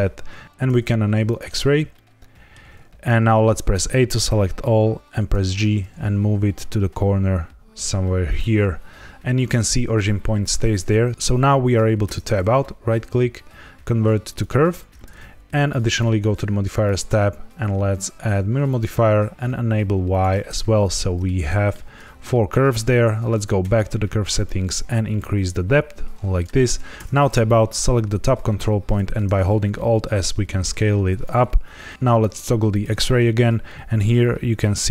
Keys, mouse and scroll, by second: 0.4 z, 1.2 click, 1.9 shift+middle click, 3.7 a, 5.2 g, 8.2 click, 12.0 Tab, 12.4 right click, 15.8 click, 16.8 click, 20.0 click, 20.4 middle click, 21.4 shift+middle click, 23.3 click, 24.4 shift+click, 26.9 Tab, 27.4 click, 28.9 alt+s, 31.0 click, 31.8 middle click, 32.6 click, 33.2 scroll up 2, 33.6 middle click.